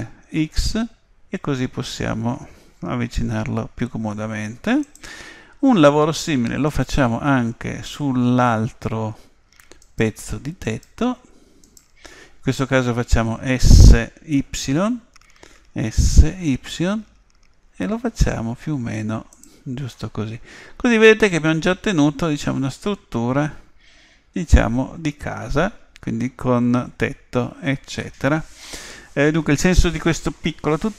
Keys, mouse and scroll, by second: 6.7-8.6 right drag, 9.9-13.5 right drag, 15.4 s, 20.0-23.0 middle drag, 27.5-29.3 middle drag.